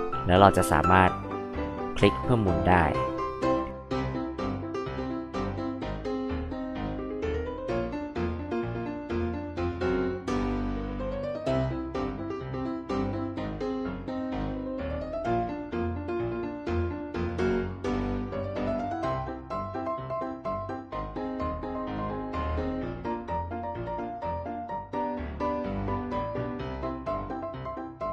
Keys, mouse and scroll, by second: 0.7 click, 3.7-7.8 drag, 8.5 click, 8.7 click, 9.2 space, 9.3 click, 9.7 ctrl+click, 10.1 ctrl+click, 10.3 ctrl+click, 11.0 click, 11.2 ctrl+click, 11.7 ctrl+click, 12.3 click, 12.9 click, 13.3 space, 13.4 click, 14.6 click, 15.0 ctrl+click, 15.4-16.8 ctrl+drag, 16.8 space, 16.8 click, 17.2 m, 17.6 space, 17.6 click, 18.4 click, 20.0 click, 20.7 click, 22.2 space, 22.4 click, 23.1 ctrl+click, 23.9 click, 24.1 click, 24.9 click, 25.4 ctrl+click, 25.7 ctrl+click, 26.2 click, 26.6 h, 26.7 click, 27.2 click, 27.5 click.